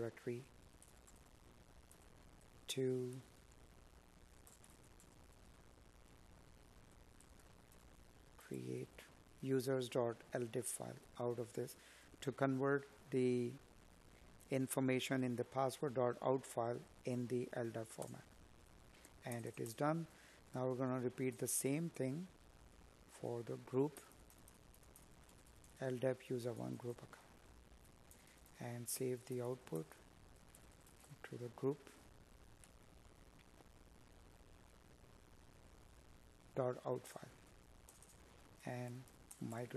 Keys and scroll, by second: 11.4 Up, 16.4 Right, 30.0 Tab, 31.0 Tab, 35.0 Tab.